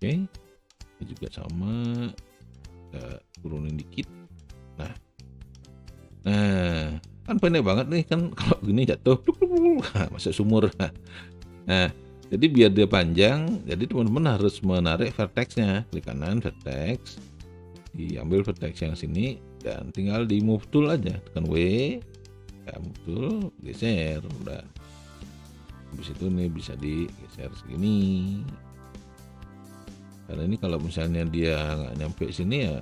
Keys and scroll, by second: 22.1 w.